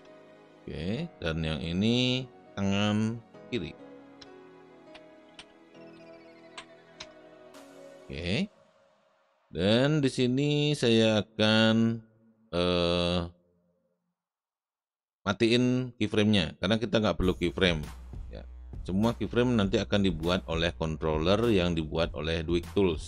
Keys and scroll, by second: 0.0-0.2 typing, 1.6 typing, 4.2 Return, 4.5-6.9 typing.